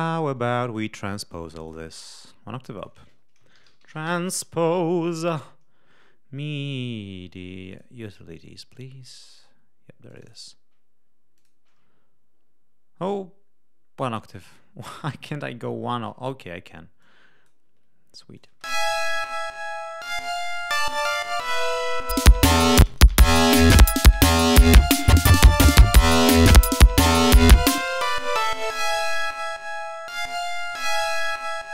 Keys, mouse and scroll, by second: 0.3 click, 1.5 right click, 2.7 click, 3.2-4.4 typing, 7.6 click, 10.0 click, 11.2-12.3 drag, 13.7 scroll up 2, 14.4 click, 15.5 scroll down 2, 16.9 click, 18.2 click, 18.4 space, 21.0 click, 22.0 click, 22.7 space, 22.7 click, 23.4 click, 26.4 click, 27.7 click, 29.1 click, 30.6 l.